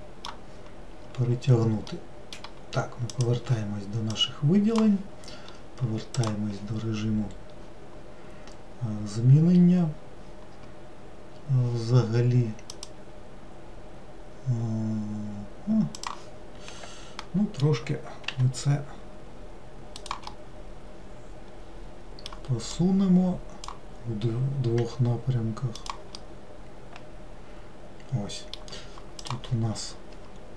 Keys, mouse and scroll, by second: 3.2-6.4 drag, 12.8 click, 17.3-18.4 middle drag, 18.4 g, 20.4-22.8 middle drag, 22.8-24.9 drag, 24.9 g, 26.3-29.3 middle drag, 29.3-30.5 drag.